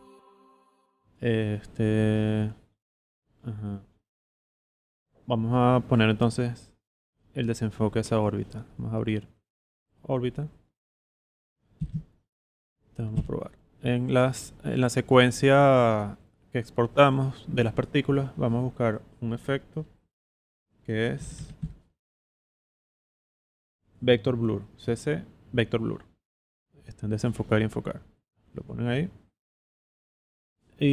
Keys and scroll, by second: 10.7 z, 11.7 v, 11.9 space, 13.1 v, 20.9-22.1 typing.